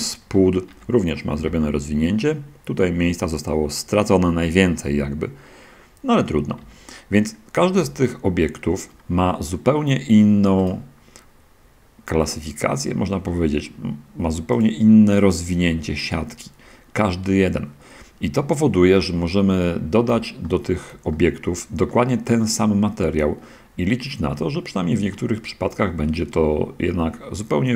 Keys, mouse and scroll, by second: 1.0 shift+Tab, 1.3 a, 6.9 Tab, 8.2-8.8 shift+middle drag, 10.9 right drag, 15.5 click, 19.6-20.0 scroll down 1, 21.2-22.1 shift+middle drag, 22.3-24.6 middle drag, 24.8-27.7 shift+drag.